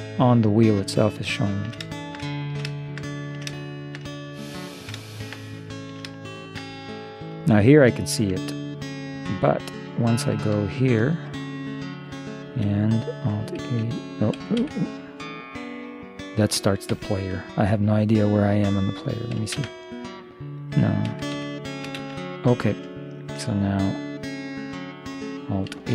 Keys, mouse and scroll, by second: 1.0-6.8 middle drag, 8.9 middle click, 9.2 middle click, 10.7 ctrl+3, 13.7 alt+a, 14.4 Escape, 14.6 Escape, 17.0 Escape, 19.6 shift+space, 21.2 Escape, 21.4 Escape, 22.0 shift+space, 22.6 middle click, 25.8 alt+h.